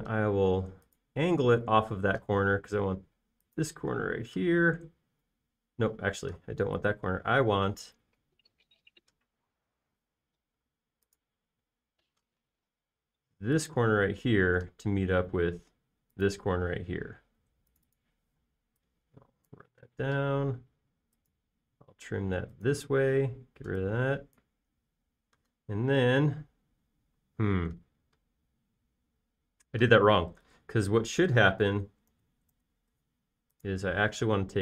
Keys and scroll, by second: 0.9 q, 8.2 Escape, 18.0 space, 19.6 p, 20.8-21.2 typing, 24.6 p, 26.3 space, 29.3 typing, 31.6 super+z, 32.7 super+z, 33.1 super+z, 33.6 super+z.